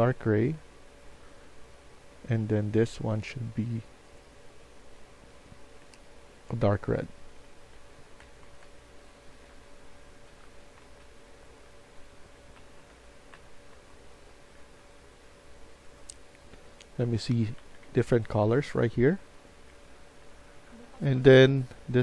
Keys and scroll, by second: 7.3 Escape, 7.7 Escape, 8.0-14.5 typing, 17.5 Escape, 17.7 Escape, 19.6 F1, 20.1-22.0 typing.